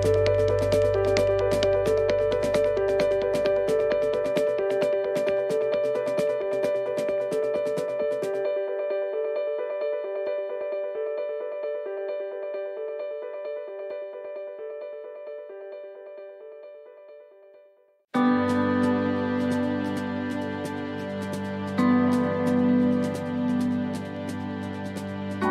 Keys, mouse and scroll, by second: 0.5 middle click, 2.6 ctrl+r, 3.5 ctrl+r, 5.5 middle click, 6.5 middle click, 8.8 click, 9.9 right click, 10.5 shift+right click, 11.8 shift+right click, 12.4 shift+right click, 12.9 shift+right click, 13.3 shift+right click, 13.4 middle click, 14.7-15.0 scroll down 2, 15.0 middle click, 16.0 e, 20.0 middle click, 20.6 scroll up 2, 21.0 middle click, 24.4 click.